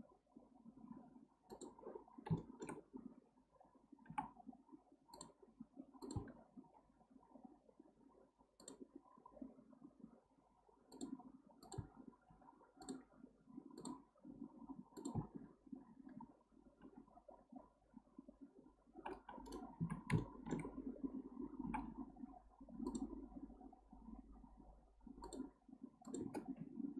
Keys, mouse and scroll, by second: 2.1 scroll up 1, 2.4-2.8 shift+middle drag, 2.8-4.1 scroll up 1, 4.1 k, 6.6 k, 7.7-10.7 scroll up 2, 12.3 k, 19.8 1, 20.2-21.6 shift+middle drag, 21.6 k.